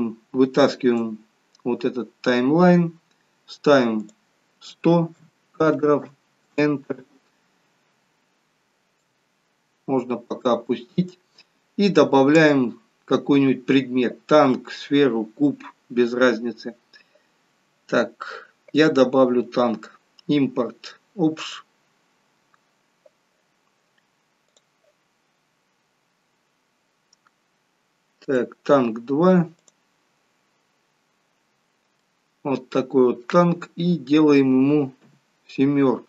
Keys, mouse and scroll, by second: 4.1 click, 6.1 0, 9.1 click, 18.8 click, 31.1-32.1 scroll down 6, 32.3 middle click, 35.1 KP_7.